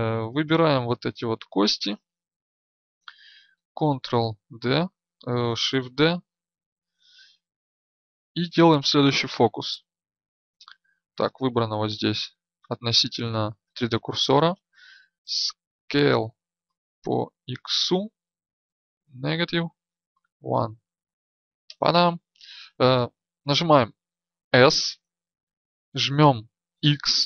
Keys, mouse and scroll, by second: 1.3 b, 4.3 ctrl+d, 5.8 shift+d.